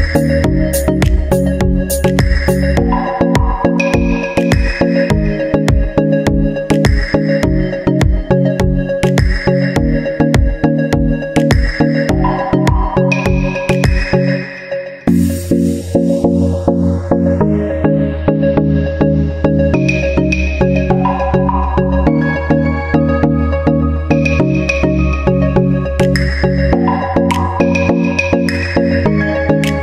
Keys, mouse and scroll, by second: 1.5 Tab, 5.1-6.2 drag, 6.8-8.8 drag, 9.2 ctrl+z, 9.7-11.4 drag, 12.2-14.6 drag, 15.1-16.3 drag, 17.6-20.9 drag, 21.1-22.3 drag, 22.6 middle click, 23.3-24.4 drag, 25.5-26.6 drag, 26.6-27.7 drag.